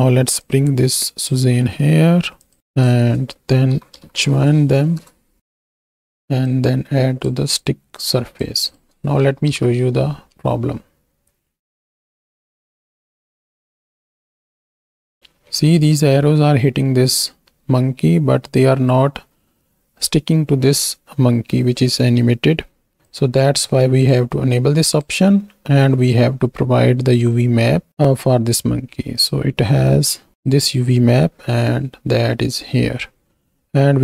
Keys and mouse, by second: 2.4 click, 2.6-5.0 drag, 5.4-5.9 drag, 6.6-7.2 drag, 7.6 click, 8.6 click, 9.4 shift+Right, 9.5 shift+Left, 10.4 space, 11.7 click, 15.6 space, 23.3 click, 24.8 click, 29.7-30.3 right drag, 30.3 drag.